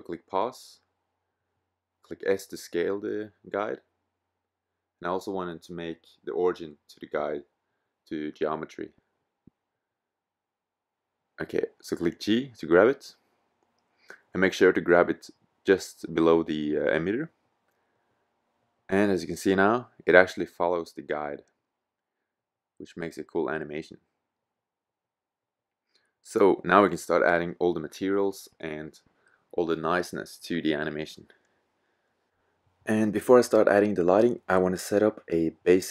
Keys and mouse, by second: 0.8 s, 2.6-4.7 drag, 5.1-8.3 middle drag, 11.2 g, 12.8-13.7 middle drag, 14.4 g, 18.3-18.7 middle drag, 20.0-21.5 middle drag, 23.8-25.5 middle drag, 26.9 middle drag, 28.2-28.7 middle drag, 30.2-33.2 middle drag.